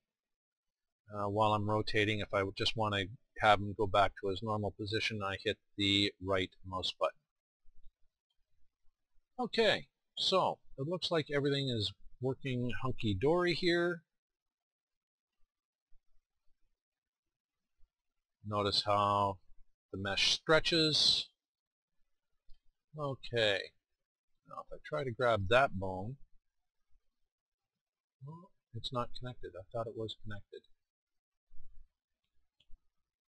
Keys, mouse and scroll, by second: 6.9-8.6 drag, 8.6 right click, 11.7 middle click, 12.0-13.3 right drag, 13.5 r, 14.7 middle click, 16.4 right click, 17.5 right drag, 17.9 right drag, 27.1 g, 29.0-30.3 middle drag, 30.9-32.7 right drag, 32.8 g.